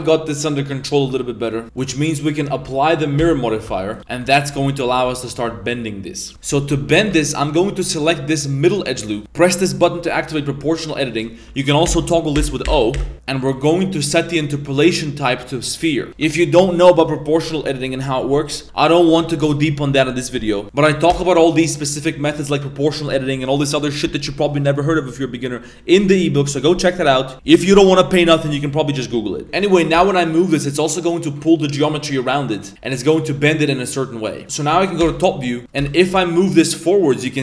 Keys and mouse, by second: 1.1 Tab, 1.5 Tab, 2.3 click, 3.2 ctrl+a, 3.6 Tab, 4.0 a, 4.0 KP_7, 4.1 Tab, 4.5 Tab, 4.8 a, 5.3 g, 6.3 middle click, 6.6 shift+middle click, 6.8 1, 7.4 right click, 7.8 middle click, 9.7 click, 11.8 o, 13.4-16.1 drag, 16.1 g, 18.6 g, 20.7 middle click, 21.1 g, 29.4 g, 32.9 middle click, 33.3 g, 35.0 KP_7, 35.8 g.